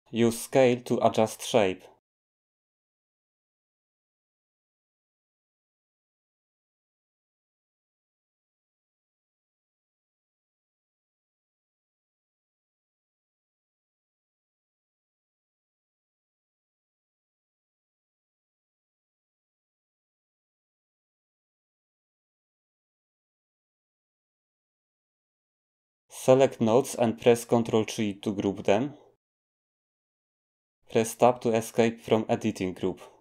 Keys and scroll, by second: 7.1-7.6 typing, 9.1-10.3 typing, 29.8 ctrl+g, 31.7 Tab.